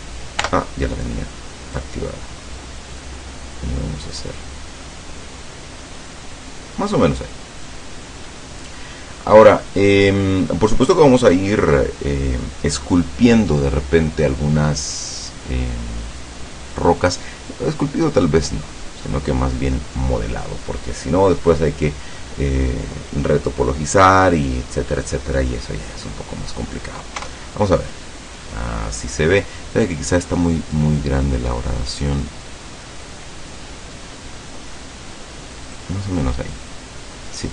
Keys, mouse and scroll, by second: 0.4 o, 1.8-3.3 drag, 3.3 middle click, 5.0 middle click, 7.8 scroll down 1, 8.2-8.7 scroll up 2, 8.9-9.2 scroll down 2, 25.6 scroll up 2, 27.3 KP_0, 30.8-33.1 drag, 33.1 scroll down 1, 34.4 scroll down 1, 34.5 scroll up 1, 37.3 middle click.